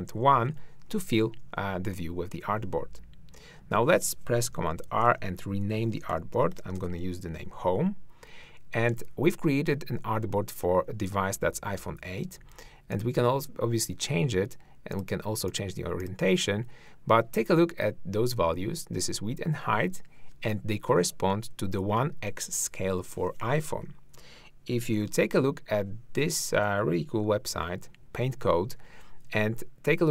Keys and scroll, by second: 0.0 super+i, 4.5 super+r, 6.1-6.8 typing, 25.1 ctrl+Right, 27.2 super+2.